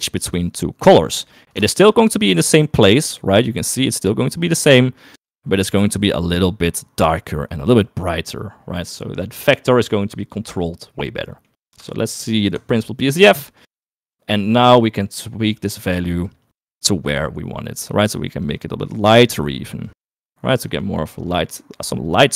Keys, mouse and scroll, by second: 1.9 ctrl+shift+click, 5.6 ctrl+shift+click, 9.1 middle click, 10.0 middle click, 11.4 middle click, 12.6 ctrl+shift+click, 13.8 middle click, 14.6 click.